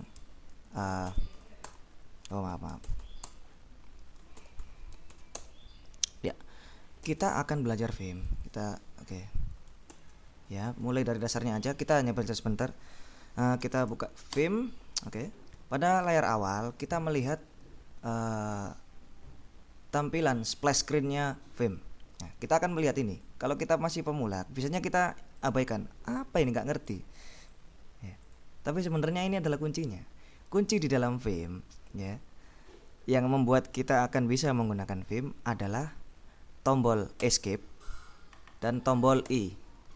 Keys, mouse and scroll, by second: 0.0 Escape, 1.2 shift+;, 1.5 shift+w, 1.8 shift+Return, 2.4 Escape, 2.8-5.7 typing, 7.1 ctrl+l, 8.3 click, 10.0 ctrl+shift+m, 11.3 click, 13.5-14.6 typing, 15.9-16.4 scroll up 2, 23.3-26.0 drag, 26.6-28.2 drag, 28.3 click, 37.4 Escape, 39.4 i.